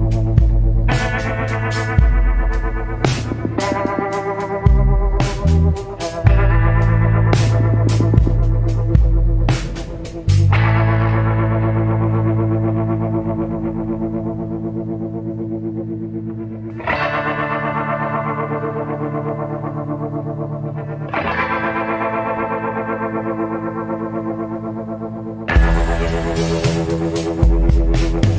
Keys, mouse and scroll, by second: 9.4 scroll down 1, 11.8 scroll down 1, 13.3 scroll down 1, 14.1 scroll up 1.